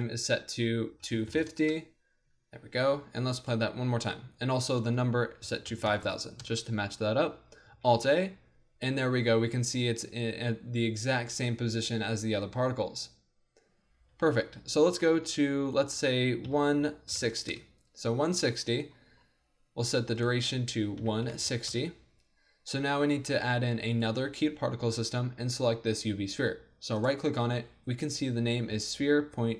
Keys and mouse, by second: 3.4-7.7 drag, 5.9 KP_0, 6.0 KP_0, 7.7 alt+a, 14.1 alt+a, 15.7-17.6 drag, 20.2-29.0 drag.